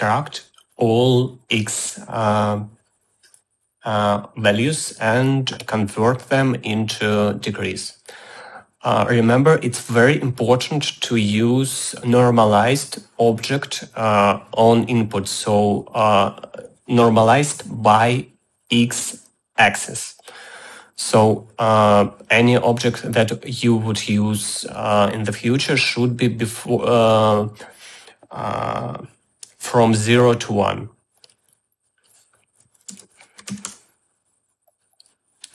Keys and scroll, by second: 33.3-34.3 typing.